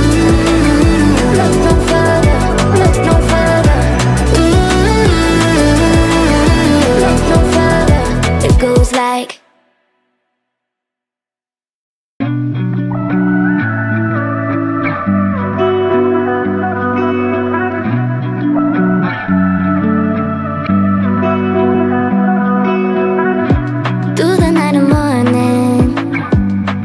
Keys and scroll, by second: 2.1 Delete, 8.0 Delete.